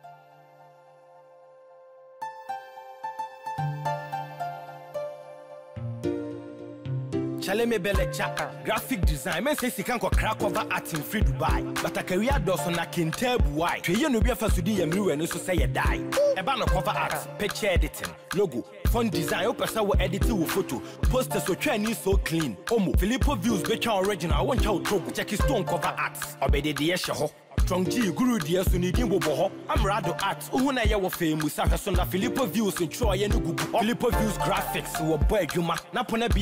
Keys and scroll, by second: 2.1 ctrl+-, 11.4 ctrl+-, 36.0 ctrl+=.